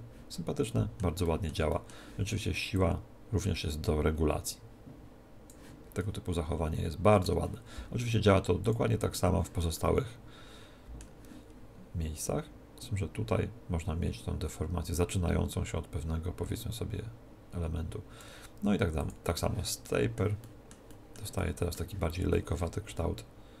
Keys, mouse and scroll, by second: 1.2-2.8 middle drag, 2.8 click, 6.0-8.6 middle drag, 8.6 click, 10.4-12.2 middle drag, 12.2 click, 19.0 click, 20.6-23.6 middle drag.